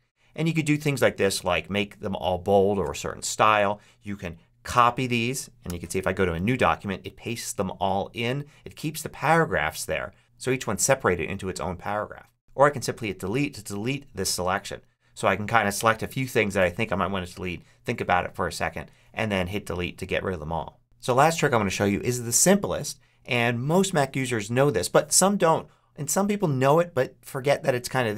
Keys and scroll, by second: 4.6 super+c, 6.2 super+v.